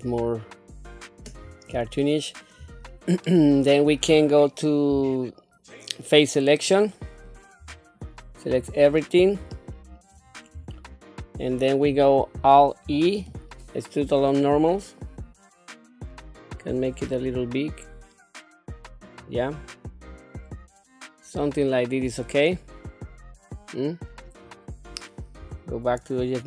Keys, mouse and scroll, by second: 1.3-1.7 scroll up 3, 2.0 shift+middle click, 2.8-3.2 scroll down 2, 3.2 middle click, 4.9 3, 7.6 3, 8.5 a, 9.5 shift+middle click, 10.2 scroll up 2, 10.7 shift+middle click, 12.8 alt+e, 19.5-24.1 middle drag, 24.5 scroll down 1, 25.4 Tab, 26.0 scroll down 1.